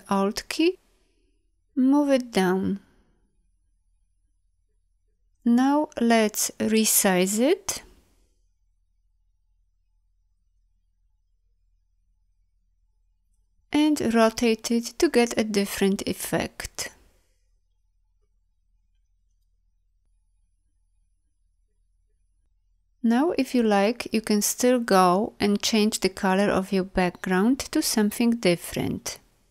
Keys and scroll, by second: 13.1 space.